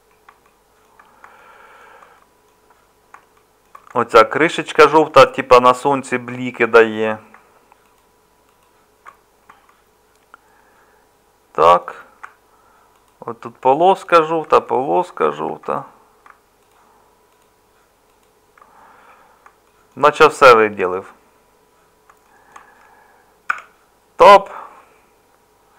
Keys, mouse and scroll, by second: 15.6 middle click, 23.5 Tab.